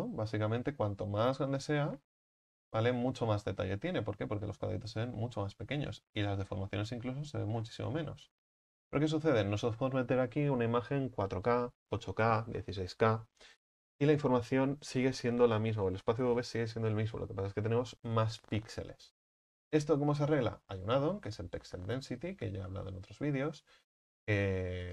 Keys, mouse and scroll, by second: 0.9 s, 2.5-2.8 scroll up 7, 3.1 shift+middle click, 3.9-6.1 scroll up 6, 6.1-7.1 scroll up 7, 7.6-8.5 scroll down 17, 8.5 ctrl+z, 21.4 click, 22.3-24.9 drag.